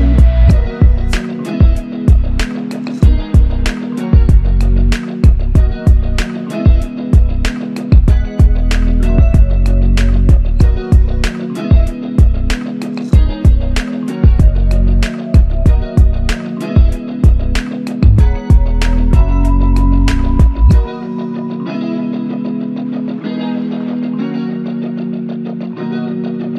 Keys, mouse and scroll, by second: 5.4 double click, 8.0 double click, 23.9 typing.